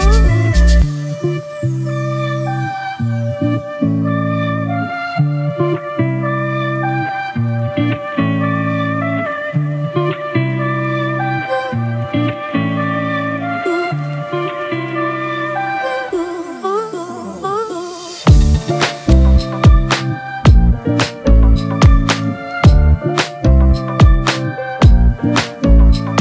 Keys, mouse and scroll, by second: 5.6 Return, 14.1 right click, 19.3 double click, 25.6 double click.